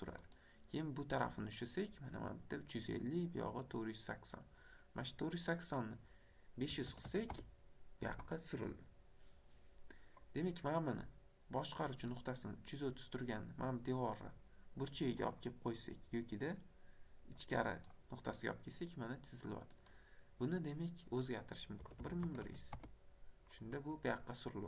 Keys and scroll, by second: 6.7 KP_5, 6.9 KP_0, 7.3 Return, 21.8 KP_1, 22.2 KP_0, 22.7 Return.